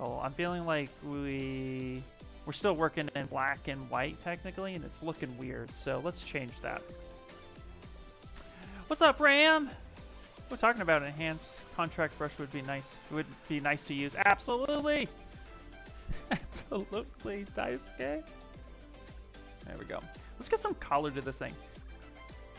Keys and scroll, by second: 6.4 Return, 6.8 Return.